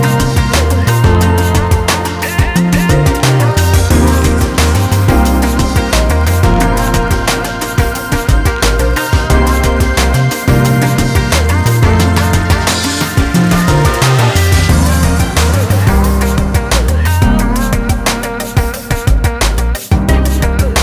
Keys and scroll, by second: 0.4 ctrl+z, 0.9 ctrl+z, 1.5-2.5 ctrl+z.